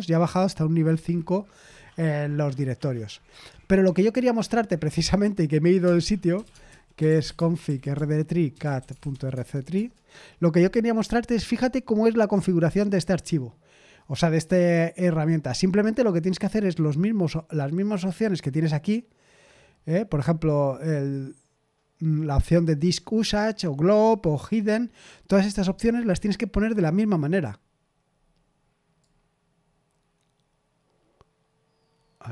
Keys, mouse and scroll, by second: 5.8 Return, 6.1-10.2 typing.